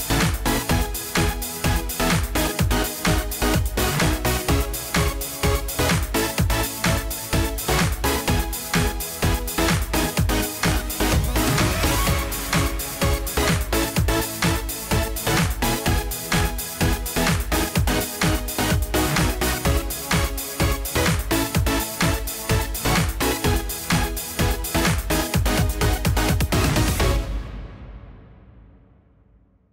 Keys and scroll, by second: 6.2 ctrl+a, 9.9 ctrl+d.